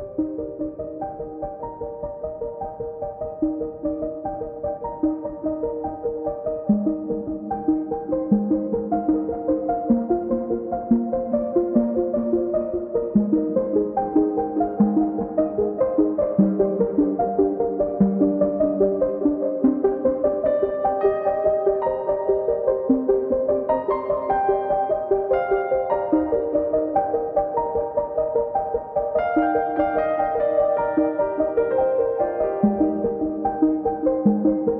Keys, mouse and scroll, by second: 0.1 scroll down 1, 1.5 click, 6.5-8.7 drag, 9.5 click, 11.7 click, 13.2 scroll down 3, 14.1 scroll, 14.3 scroll up 1, 15.1-18.1 drag, 18.4 click, 18.6 scroll up 4, 18.7 scroll down 3, 19.3 click, 19.4 scroll down 5, 20.0 click, 21.8 middle click, 22.0 click, 22.2 middle click, 22.6 click, 22.9 middle click, 23.1 click, 23.2 scroll up 3, 23.4 middle click, 23.8 KP_1, 25.3 middle click, 25.7 click, 25.9 middle click, 26.2 click, 26.2 middle click, 26.4 click, 26.6 middle click, 27.7 click, 28.7 click, 29.6 middle click, 29.7 scroll up 1, 30.0 click, 31.4 middle click, 31.7 click, 32.2 middle click, 32.5 click, 32.8 middle click, 32.9 click, 33.3 middle click, 33.4 click, 34.2 middle click, 34.4 click.